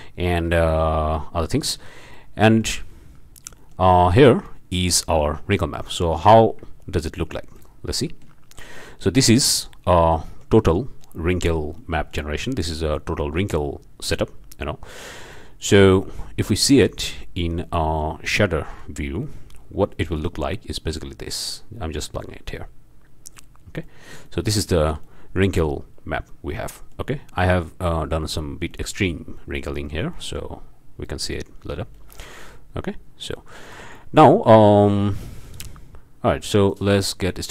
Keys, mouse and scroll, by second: 1.2 click, 2.1 click, 3.0-3.5 scroll down 2, 3.6 shift+click, 4.4 click, 5.8-6.3 drag, 7.5 ctrl+shift+click, 8.6-9.9 ctrl+shift+drag, 10.0 scroll up 1, 10.3-10.8 shift+drag, 11.0 drag, 11.8-12.8 drag, 12.9-13.8 drag, 14.1-15.2 drag, 15.9 middle click, 16.0-16.4 drag, 16.7-17.1 ctrl+shift+drag, 17.7-18.2 drag, 18.7 click, 19.2-19.6 drag, 20.1-21.7 drag, 23.8-24.6 shift+drag, 24.8 alt+shift+a, 25.0-25.9 alt+shift+drag, 26.3-27.1 drag, 28.7-29.3 drag, 29.4-29.8 shift+drag, 29.8 shift+scroll up 1, 30.1-30.6 shift+drag, 31.0-31.6 drag, 31.9 drag, 33.1 shift+middle drag, 33.4-34.1 shift+drag, 34.6-35.3 drag, 35.4 click, 36.7-37.5 drag.